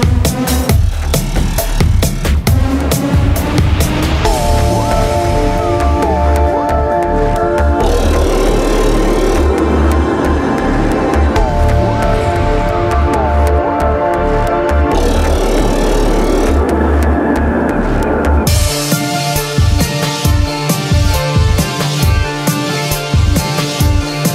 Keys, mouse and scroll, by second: 0.3-1.6 middle drag, 11.8 middle click, 13.8-15.8 drag, 15.5 KP_1, 16.9 Tab, 18.7 z, 19.4 a, 24.0-24.3 drag, 24.0 a.